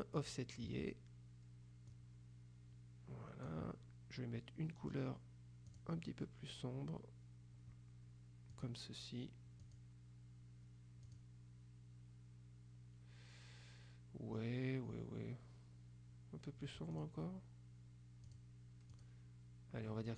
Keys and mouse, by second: 0.3 click, 2.0-4.0 drag, 5.8 click, 8.6 click, 9.7 click, 11.1 click, 17.1 click, 18.4 click.